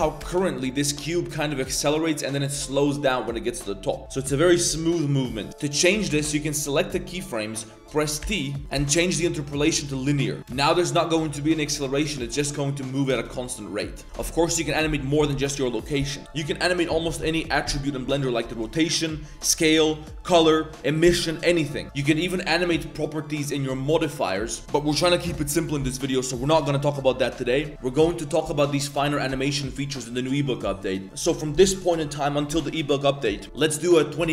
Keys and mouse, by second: 0.2 space, 2.6 space, 5.5-6.2 typing, 8.2 t, 8.7 t, 10.5 space, 13.1 space, 14.0 middle drag, 17.1 middle click, 22.7 click, 23.4 click, 23.7 click, 23.8 right click.